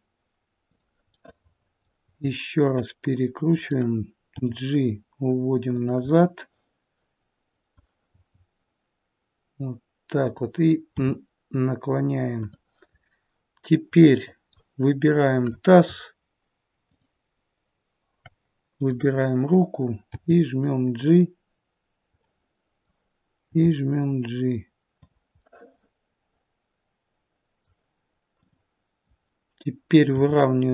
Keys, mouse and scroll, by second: 1.0 middle click, 2.0 r, 4.3 g, 6.0 middle click, 8.1 g, 10.9 r, 12.9-13.9 scroll up 3, 14.0 middle click, 14.1 middle click, 16.0 middle click, 16.8 shift+click, 20.1 shift+click, 20.1 g, 22.2 middle click, 23.4 g, 25.3 middle click, 28.4 click, 30.1 r.